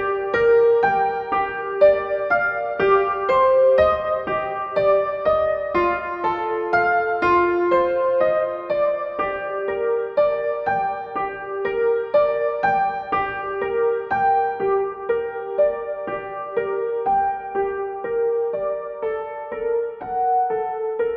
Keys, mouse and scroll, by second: 1.8 z, 3.6 space, 4.6-13.9 alt+drag, 13.9-17.0 shift+drag, 17.0 Down, 19.6 click.